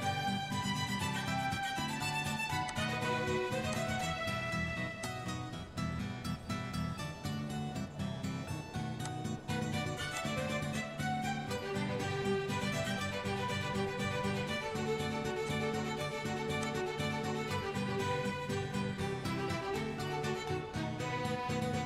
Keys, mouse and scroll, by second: 0.1 Delete, 2.7 click, 3.7 click, 5.1 click, 5.9 scroll down 1, 5.9-6.5 scroll, 6.7-7.4 scroll up 9, 7.4 scroll up 1, 7.6-8.1 scroll, 8.9 scroll, 9.1 click, 10.3 click, 13.5 k, 15.5 click, 16.7 click, 18.1 Return.